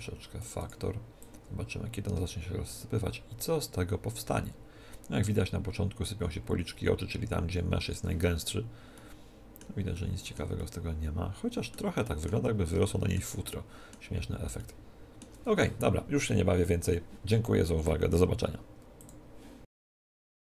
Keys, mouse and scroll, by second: 8.5-16.4 middle drag.